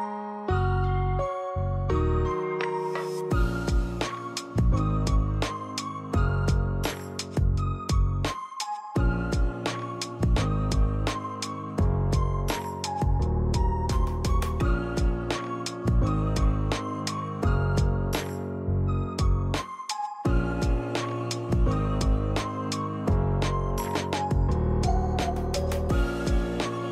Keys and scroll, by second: 1.6-3.1 typing, 1.9 Return, 5.8 p, 9.4 r, 10.2 Escape, 12.9 d, 14.2 1, 14.5 Return, 14.5 5, 17.6 e.